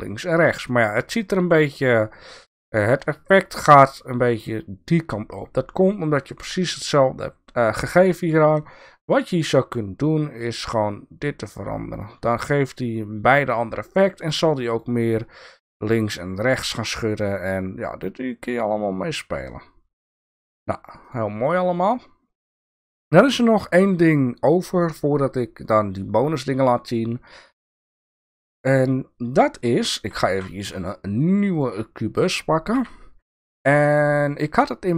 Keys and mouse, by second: 23.1-24.1 drag, 25.3 click, 26.9-28.4 drag, 30.2 shift+a, 32.7 g.